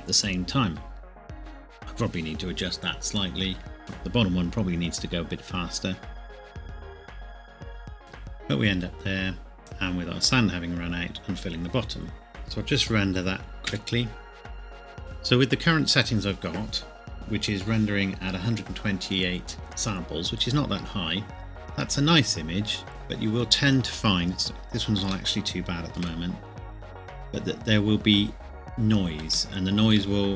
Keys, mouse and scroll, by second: 3.8 shift+middle click, 6.7 space, 6.8 click, 7.5 right click, 7.6 space, 7.8 click, 8.1 alt+h, 9.6 KP_0, 12.3 click, 13.6 F12, 15.0 click, 21.4-22.0 scroll up 1, 22.0 scroll down 1, 25.3 shift+middle click, 26.2 scroll up 1, 29.3 scroll up 1, 29.5 shift+middle click.